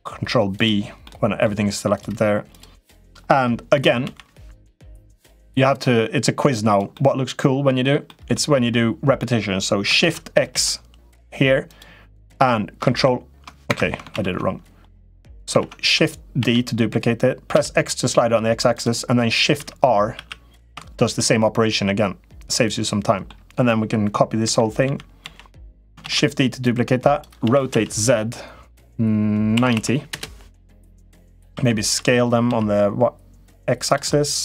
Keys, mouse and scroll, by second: 0.9 right click, 1.7 click, 2.3 click, 2.7 middle click, 3.8 l, 4.9-6.5 drag, 6.8 middle click, 7.8 middle click, 9.8 shift+d, 12.7 ctrl+r, 13.9 ctrl+z, 14.6 click, 15.3 ctrl+z, 16.2 shift+d, 19.3 shift+r, 19.9 shift+r, 20.9-23.0 middle drag, 24.2 l, 24.6 l, 25.0 l, 25.8 shift+d, 26.4 click, 27.2 r, 30.8 middle click, 31.3 s, 33.8 middle click.